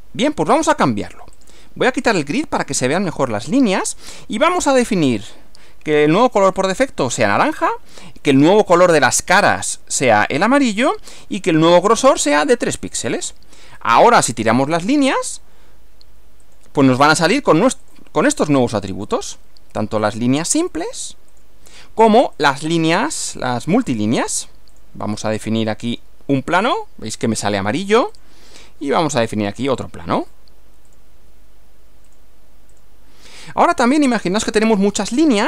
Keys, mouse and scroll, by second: 1.4 click, 1.6-2.5 typing, 4.4 click, 6.4 click, 7.3 click, 8.6 click, 10.1 click, 10.9 click, 12.1 click, 12.9 click, 13.8 click, 14.9 click, 16.5 click, 17.9 click, 18.5 click, 19.1 click, 20.1 click, 20.7 click, 21.3 click, 22.4 click, 23.3 click, 23.9 click, 24.7 click, 25.9 click, 26.5 click, 28.1 click, 29.7 click, 30.2 click, 30.9 click, 32.1 click, 32.8 click.